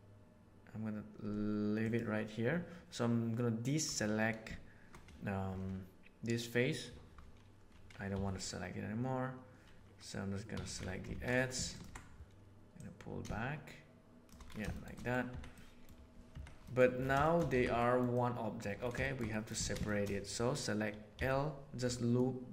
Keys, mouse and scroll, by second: 8.1 3, 10.5 2, 11.0 alt+a, 11.6 alt+click, 12.6-14.2 drag, 14.7 shift+click, 14.9 click, 15.2 Tab, 15.5-15.8 middle drag, 16.2 Tab, 16.6 middle click, 17.2 shift+middle click, 17.4 a, 17.8 middle click, 18.1 middle click, 19.0 shift+middle click, 19.2 middle click, 19.8 shift+middle click, 21.1 l, 22.1 middle click.